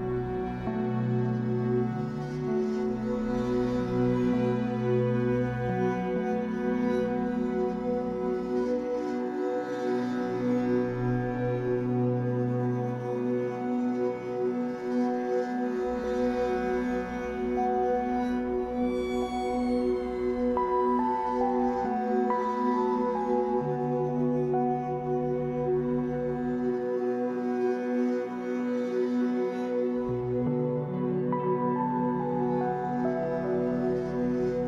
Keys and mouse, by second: 0.4 space, 4.6 space, 5.1-6.7 alt+drag, 8.9 alt+click, 10.4 click, 11.0 space, 11.7 click, 13.9 click, 15.2 click, 18.2 click, 21.1-23.6 shift+drag, 25.0-26.2 drag, 26.3-30.6 drag, 31.6 alt+click, 32.6 ctrl+alt+click, 33.3 click, 34.6 s.